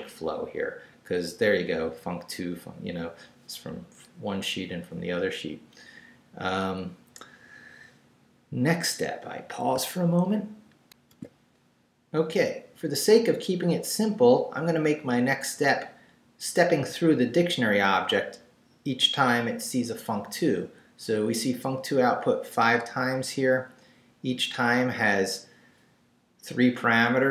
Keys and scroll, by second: 10.9 alt+shift+super+z.